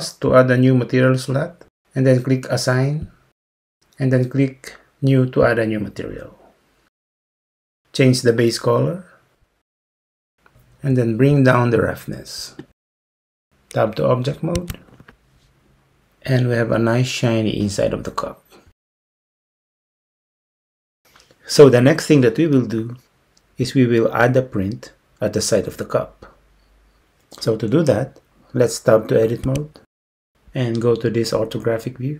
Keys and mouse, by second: 7.6 click, 12.7 click, 14.6 Tab, 29.6 Tab.